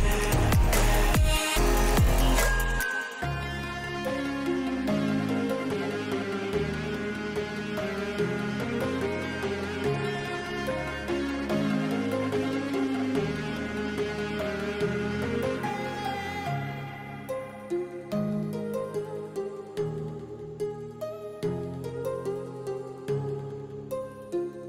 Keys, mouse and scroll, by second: 0.4 shift+a, 3.7 middle click, 5.0 click, 5.8 click, 7.2 click, 8.5 shift+middle click, 9.4 click, 9.5-10.6 right drag, 11.6-15.7 drag, 16.4 shift+middle click, 17.5-19.2 drag, 19.6-20.7 drag, 21.4 middle click, 22.2 middle click, 23.1-24.3 drag.